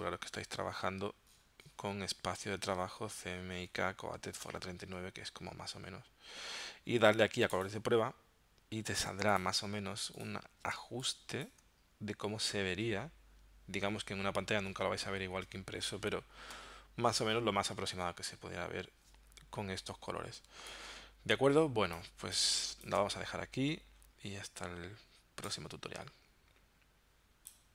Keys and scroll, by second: 10.8 space, 20.5 space.